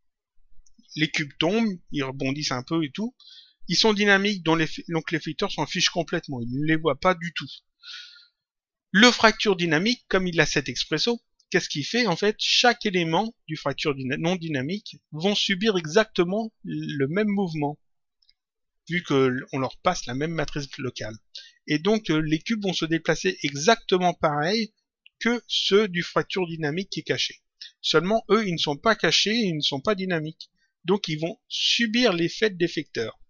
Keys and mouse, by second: 9.1 click.